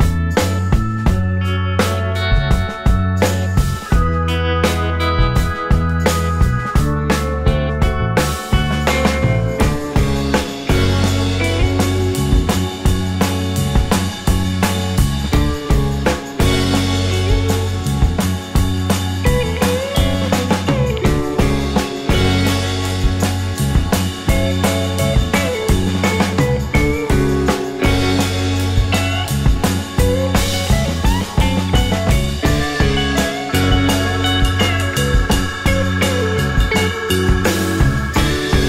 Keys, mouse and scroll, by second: 1.6 space, 2.1 space, 2.5 scroll down 1, 3.0 alt+click, 4.1 scroll down 1, 4.5 alt+click, 6.1 alt+click, 9.1 alt+click, 9.6 alt+middle click, 12.0 right click, 13.6 space, 16.1 scroll, 16.3 scroll down 1, 16.4 alt+click, 17.0-17.3 scroll down 2, 17.4 alt+scroll up 1, 17.7 alt+click, 21.4 right click, 22.2-22.8 scroll down 1, 22.8 space, 22.9 double click, 23.3 space, 24.5 scroll down 1, 24.6 alt+click, 30.2 scroll up 1, 31.0 alt+scroll down 1, 31.3 alt+middle click, 31.9 alt+click, 32.6 space, 33.5 space, 34.1-35.2 scroll up 1, 35.2 scroll up 2, 35.4 alt+middle click, 35.7-37.5 scroll up 1, 37.5-37.9 alt+scroll up 1, 37.9 double click.